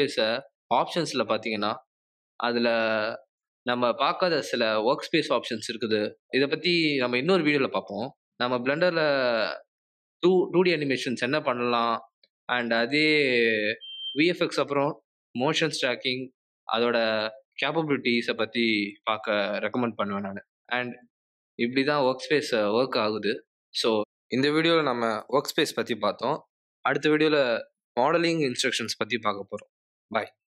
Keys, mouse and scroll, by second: 18.4 ctrl+n.